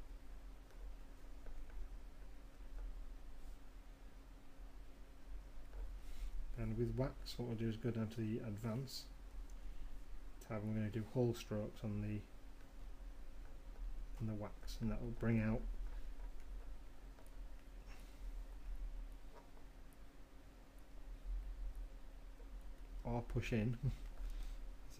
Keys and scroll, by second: 4.8 ].